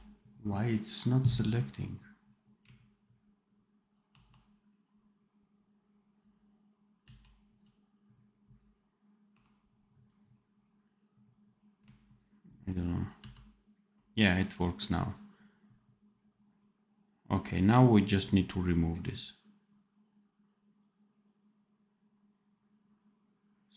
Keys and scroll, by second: 4.0 ctrl+1, 6.9 ctrl+c, 9.2 1, 13.1 ctrl+v.